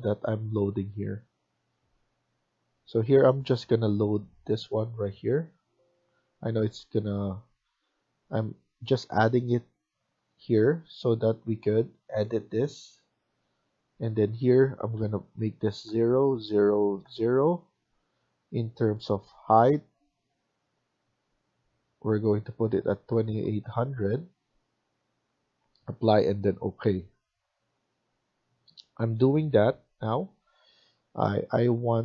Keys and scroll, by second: 5.9 Escape, 6.1 Escape, 15.7 0, 16.9 0, 23.0-23.7 typing.